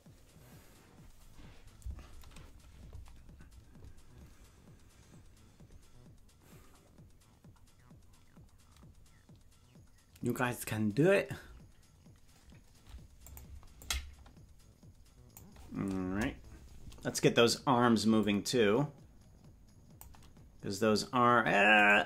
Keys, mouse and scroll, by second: 13.3 click, 13.8-15.5 drag, 16.0 KP_0, 18.3-20.1 drag.